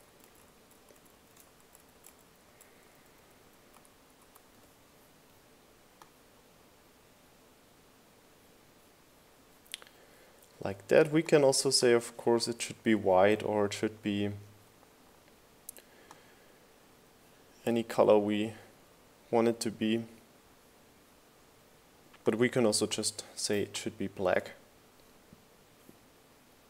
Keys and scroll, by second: 1.2 super+v, 1.5 shift+Up, 1.7 shift+Left, 1.8 shift+Up, 2.1 shift+Left, 2.3 shift+Up, 2.4 shift+Left, 2.6 shift+Up, 3.1 shift+Right, 3.4 shift+Up, 3.6 shift+Left, 3.8 shift+Up, 4.1 Right, 4.3 Up, 4.6 Right, 4.8 Up, 6.8 Left, 6.9 Up.